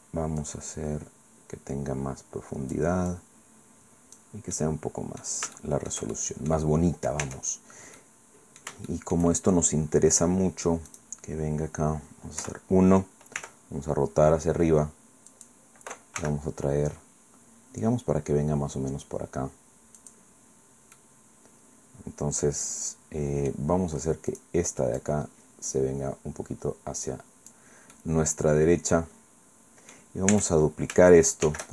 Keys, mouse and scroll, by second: 0.4-3.0 drag, 3.1-4.4 drag, 4.6 click, 5.6 shift+click, 6.2 shift+click, 7.2 Tab, 7.5-7.8 scroll down 1, 8.0 click, 8.9 shift+click, 8.9 shift+middle click, 10.9 middle click, 12.4 KP_1, 13.4 r, 15.3 click, 16.2 g, 20.0 click, 20.6 scroll down 1, 21.0-23.7 drag, 24.3 right click, 25.0-27.7 drag, 28.0-30.1 drag, 30.3 Tab, 31.4 shift+d.